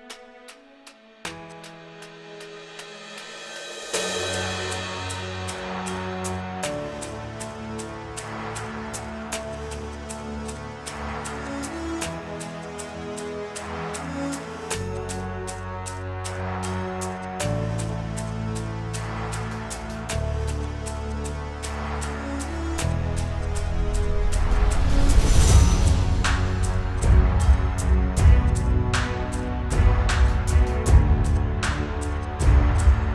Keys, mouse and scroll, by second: 7.1 click, 7.3 click.